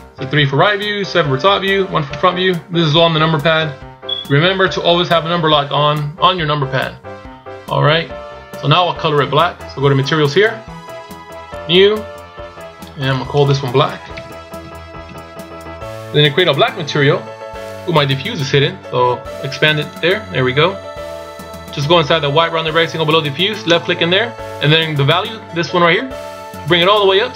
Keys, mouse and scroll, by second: 0.2 KP_3, 1.0 KP_7, 2.0 KP_1, 10.1 click, 11.3 click, 19.7 click, 23.7 click.